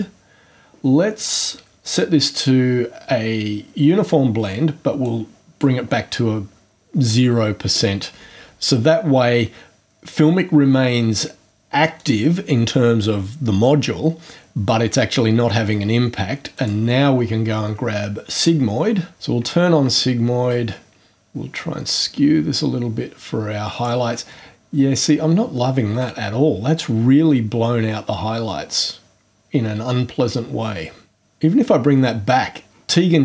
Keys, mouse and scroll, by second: 3.4 scroll down 2, 5.0-5.8 drag, 10.5-11.0 scroll up 2, 11.9 click, 16.5 click, 21.1-24.0 drag.